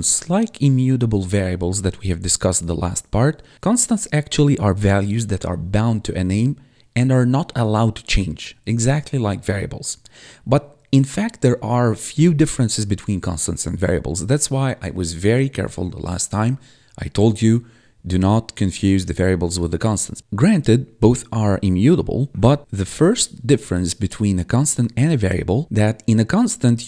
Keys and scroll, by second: 22.3 ctrl+/.